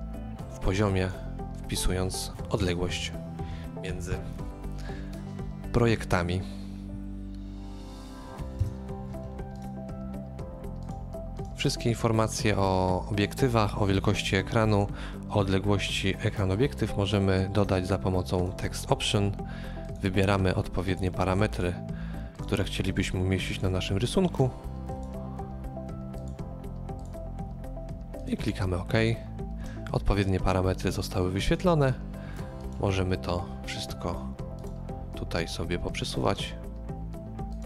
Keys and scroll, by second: 2.5 KP_3, 2.6 KP_1, 4.4 typing, 8.6 KP_0.